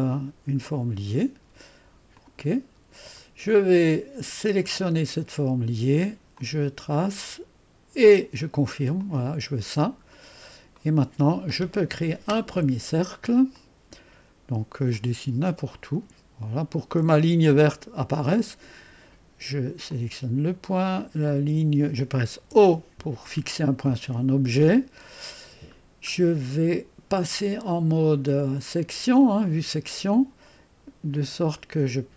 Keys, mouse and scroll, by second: 0.6 click, 2.4 click, 3.4-3.8 scroll down 1, 4.4 click, 6.3 click, 8.0 click, 9.0 click, 9.5 click, 10.1-10.8 scroll up 1, 10.8-14.0 drag, 14.9 click, 15.7 click, 17.9-20.0 drag, 21.2 click, 21.8 click, 22.4 o, 25.8-26.8 middle drag, 29.2 click.